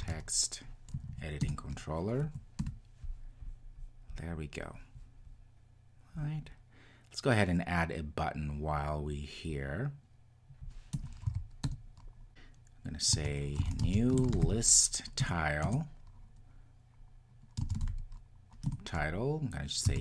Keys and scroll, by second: 3.4 Return, 15.2 Return, 16.0 Return.